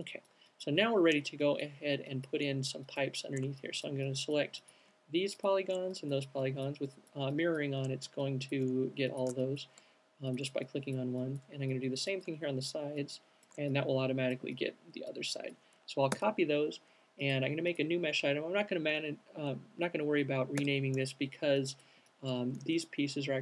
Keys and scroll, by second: 16.2 super+c, 20.7 super+v.